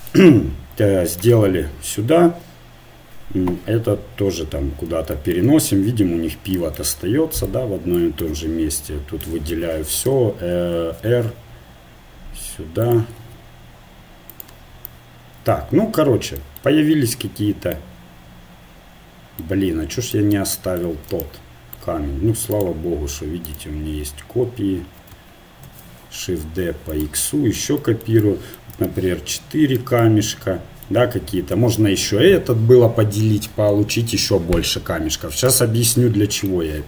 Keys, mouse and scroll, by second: 1.1-2.6 right drag, 2.6 click, 7.5 click, 8.2 Tab, 9.5 a, 10.1 t, 11.0 r, 13.2 g, 15.7 Tab, 22.6-25.6 right drag, 25.6 shift+d, 34.6 middle click, 35.5 a.